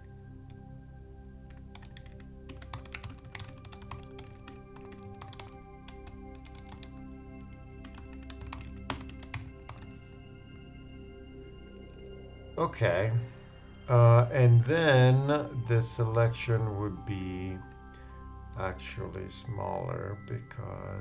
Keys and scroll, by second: 2.6 shift+space, 2.7 shift+g, 8.2-9.0 typing.